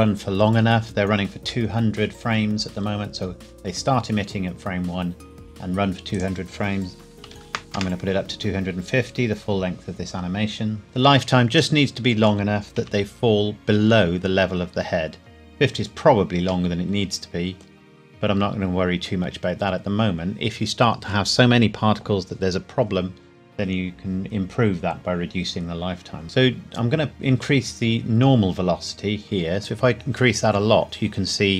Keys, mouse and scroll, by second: 6.1 click, 7.1 KP_2, 7.7 KP_Enter, 7.7 KP_0, 8.8 KP_Enter, 11.8 middle click, 12.8 KP_1, 13.9 scroll down 1, 16.7 middle click, 17.7 scroll down 1, 17.9-18.3 scroll up 1, 26.2 click, 29.6 click.